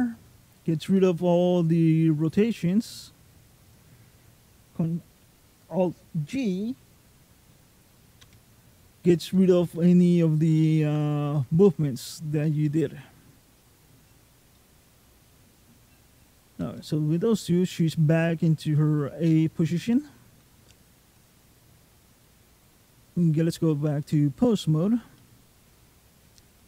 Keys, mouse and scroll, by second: 0.8 alt+middle click, 2.5 alt+middle click, 8.0 alt+g, 9.1 middle click, 12.5 middle click, 14.4 middle click, 16.6 middle click, 18.4 shift+middle click, 19.0-19.5 scroll up 3, 19.5 middle click, 21.1 click, 23.2-24.1 scroll down 2, 24.4-24.8 scroll up 1, 25.0 shift+middle click, 26.0 click, 26.4 middle click.